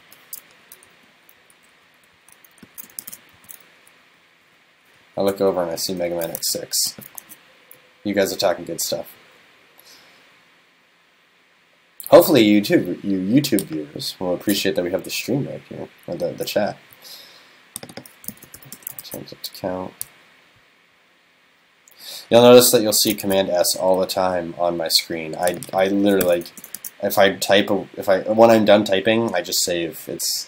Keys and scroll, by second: 0.7 alt+Right, 1.8 alt+Left, 2.2 alt+Left, 4.0 alt+Right, 6.4 super+s, 7.3 super+s, 19.0 super+s, 23.3 super+s, 26.8 super+s.